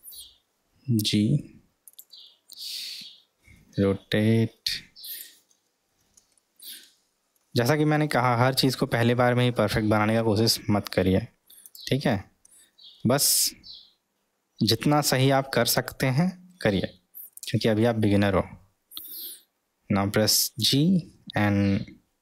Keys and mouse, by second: 0.1 g, 3.7 r, 6.4 middle click, 7.7-8.2 middle drag, 9.1-9.8 middle drag, 10.5 s, 13.0 g, 20.6 g.